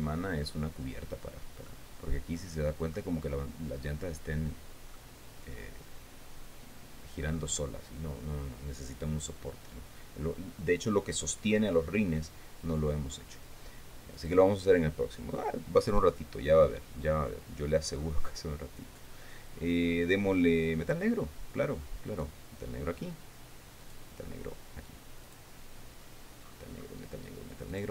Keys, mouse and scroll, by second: 2.2-3.6 middle drag, 5.5-8.1 middle drag, 14.7 click, 16.6-17.3 scroll down 1, 17.5-18.1 scroll down 1, 18.6 scroll down 1, 19.1 scroll down 1, 21.4 click, 22.6 right click, 24.4 right click, 25.8 click, 26.3-26.9 scroll down 2, 27.0-27.6 scroll down 4.